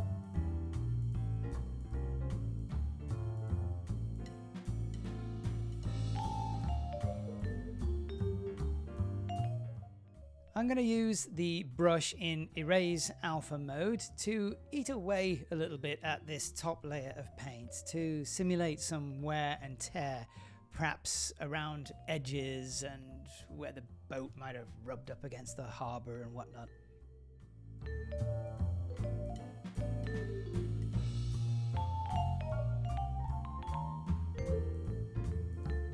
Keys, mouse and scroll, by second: 0.0-1.0 drag, 0.3 BackSpace, 0.4 BackSpace, 1.7-2.3 click, 1.9 click, 2.7 click, 3.7-4.0 click, 3.7 click, 3.8 click, 4.2 click, 4.2 shift+middle click, 4.4 click, 4.5 click, 4.6 click, 4.7 shift+middle click, 4.9 click, 4.9 click, 5.1 click, 5.1 f, 5.1-5.5 click, 5.2 click, 5.5 shift+middle click, 5.6 shift+click, 5.7 shift+middle click, 6.3 click, 6.5 shift+middle click, 6.9-7.4 click, 7.0 click, 7.1 click, 7.1 click, 7.4 shift+middle click, 7.6 click, 7.8 click, 7.8 middle click, 7.9 click, 8.1 middle click, 8.2 click, 8.3 click, 8.4 click, 8.5 click, 8.6 click, 8.7 shift+middle click, 8.8 click, 8.9 click, 9.0 click, 9.0 click, 9.2 shift+middle click, 9.3 click, 9.4 ctrl+middle click, 9.5 ctrl+shift+middle click, 13.1-15.2 drag, 19.7 f, 21.0 shift+click, 21.8 shift+f, 22.7 click, 23.7 click, 24.7 click, 25.3 click, 26.3 click, 27.0 click, 27.3 ctrl+shift+middle click, 27.8 click, 28.3 click, 28.3 shift+f, 28.9 click, 28.9 f, 29.5 click, 29.8 click, 29.9 click, 30.5 super+z, 30.6 f, 30.7 shift+click, 31.3 middle click, 31.5 ctrl+shift+middle click, 32.0-32.4 click, 32.2 click, 32.2 click, 32.3 click, 32.7-33.0 click, 32.8 click, 32.9 click, 32.9 click, 33.2 shift+middle click, 33.5 click, 33.6 click, 33.7 click, 34.0 ctrl+middle click, 34.5 click, 35.0 ctrl+middle click, 35.3 click, 35.5 click.